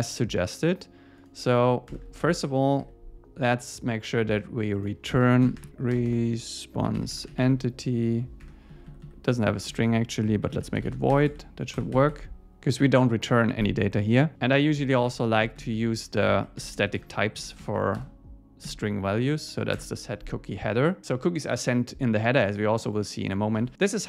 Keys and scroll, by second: 1.9 alt+Return, 2.8 Escape, 8.4 Tab, 8.7 Left, 9.7 alt+shift+Left, 11.1 Escape, 12.3 Escape, 15.0 alt+shift+Right, 18.0 Return, 19.8 Return, 21.0 super+s, 23.6 super+s.